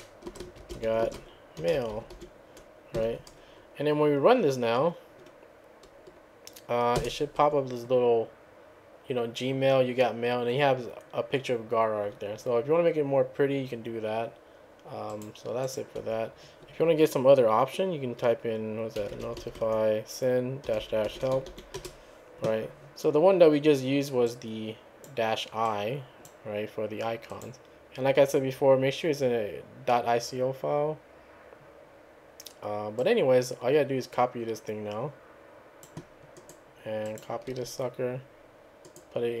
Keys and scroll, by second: 0.0-3.0 typing, 7.0 Return, 7.4 `, 18.8-22.0 typing.